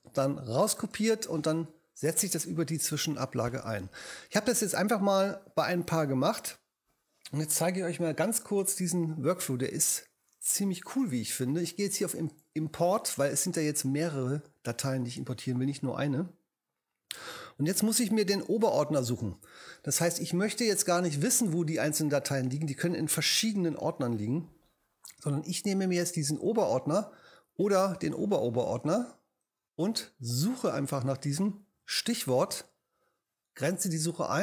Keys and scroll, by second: 0.5 super+v, 2.9 Home, 18.2 super+Up, 31.7 super+v.